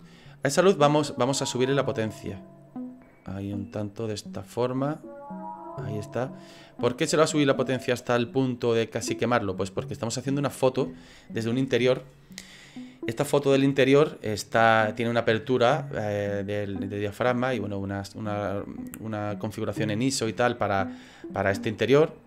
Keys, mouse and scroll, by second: 1.8 click.